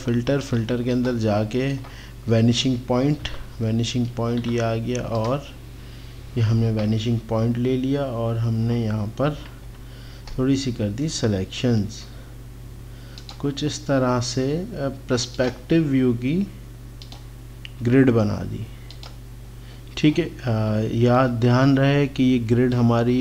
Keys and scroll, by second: 3.2 KP_8, 9.4 ctrl+=, 21.1 x.